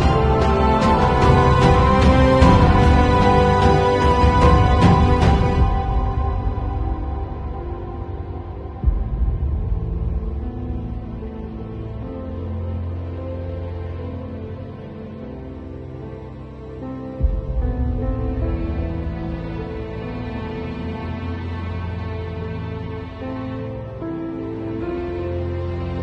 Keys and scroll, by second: 1.2 [, 2.2 [, 2.9 ], 3.1 [, 4.2 [, 4.5 ], 5.4 [, 6.6-15.5 typing, 16.8 [, 20.0 space, 21.3 ], 21.9 ].